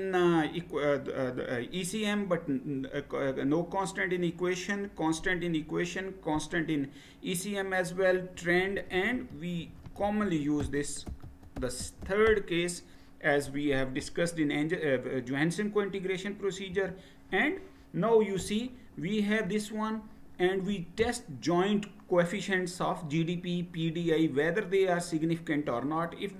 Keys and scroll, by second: 8.3-12.8 typing, 16.7 Return.